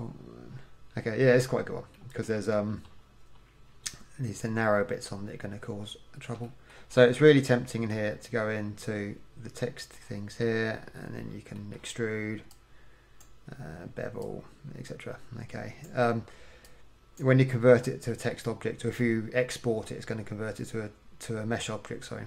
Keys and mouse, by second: 2.0-5.7 middle drag, 2.5 KP_1, 6.5 middle click, 12.6-16.1 drag, 16.7-18.4 drag, 18.4 middle click.